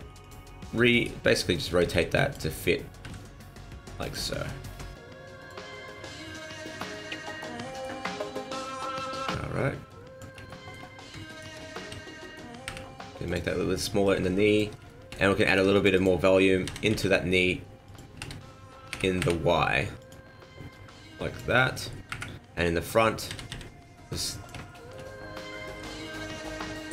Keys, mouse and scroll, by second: 0.2 click, 0.9 right click, 1.6 b, 3.0 r, 3.9 r, 3.9 b, 4.5 g, 5.7-6.0 scroll down 3, 6.1-6.5 scroll up 3, 6.6 shift+middle click, 7.6 alt+right click, 8.6 click, 10.4 shift+middle click, 11.2 alt+right click, 11.7 s, 14.0 click, 14.8 shift+middle click, 15.4 ctrl+r, 16.6 s, 18.1 s, 20.6 click, 22.0 KP_1, 23.2 s, 24.6 shift+middle click, 25.0-25.6 scroll down 6, 25.9 Tab, 26.2 middle click.